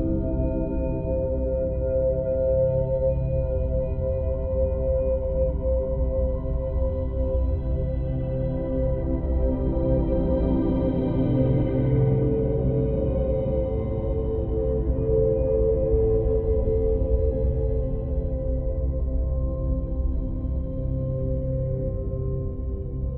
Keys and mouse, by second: 0.1 click, 0.3 alt+middle click, 0.7-2.9 typing, 1.5 click, 1.9 click, 3.1 click, 3.7 alt+middle click, 4.1 click, 5.1 2, 5.1 f, 5.3 click, 5.5 f, 6.3 click, 7.1 alt+middle click, 7.7 5, 7.9 click, 7.9 f, 8.5 alt+middle click, 8.7 click, 9.3 click, 10.1 alt+middle click, 10.5 f, 10.7 click, 11.1 click, 11.3 f, 11.5 click, 11.9 click, 12.3 ctrl+alt+f, 12.5 click, 13.1-14.5 drag, 14.7 click, 15.1 click, 15.7 click, 16.7 click, 17.5 click, 17.9 alt+middle click, 18.3 click, 18.3 f, 19.3 click, 19.7 alt+middle click, 19.9 click, 20.4 ctrl+alt+middle click, 21.2 alt+middle click, 21.6 8, 21.8 ctrl+click, 21.8 f, 22.6 ctrl+f, 23.0 click.